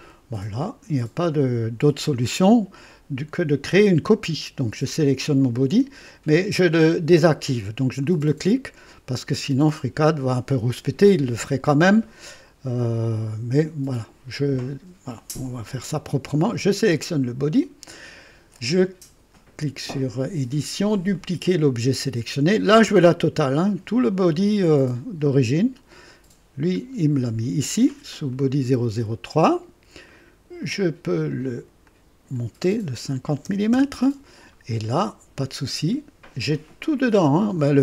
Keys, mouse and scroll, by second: 8.0 click, 16.5 click, 19.3 click, 21.1 click, 25.5 click, 26.8-27.1 scroll down 2, 28.3 click, 30.0 click, 30.6 click, 31.8 click, 33.2 KP_5, 33.4 KP_0, 33.7 KP_Enter, 35.7 scroll down 1, 36.7 click, 37.0-37.3 scroll down 1.